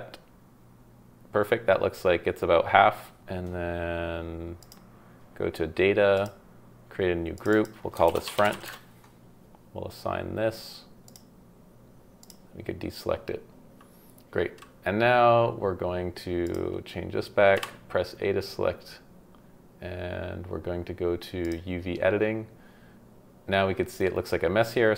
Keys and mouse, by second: 3.2 KP_3, 4.6 click, 6.2 click, 7.3-8.6 middle drag, 12.2 middle click, 16.5 middle click, 17.5 a.